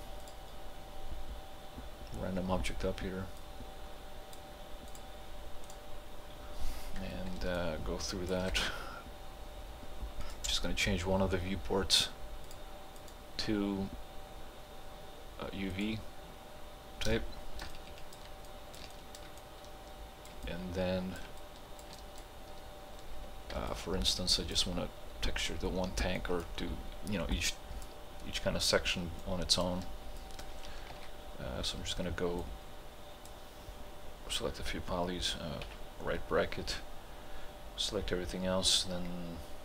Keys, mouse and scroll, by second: 3.4-4.9 drag, 7.6-10.3 alt+drag, 15.8 click, 17.7-20.5 ctrl+alt+drag, 20.5-22.0 ctrl+alt+drag, 24.0-24.7 alt+drag, 27.7-28.0 alt+drag, 29.6-29.9 alt+drag, 30.9 ctrl+h, 32.4 click, 32.5-35.7 drag, 35.7 ].